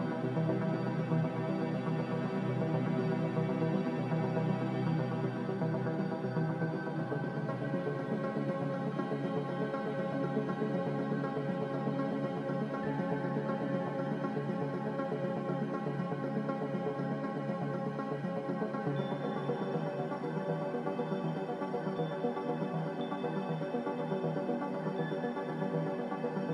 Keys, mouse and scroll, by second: 0.0-5.2 typing, 15.8-17.1 typing.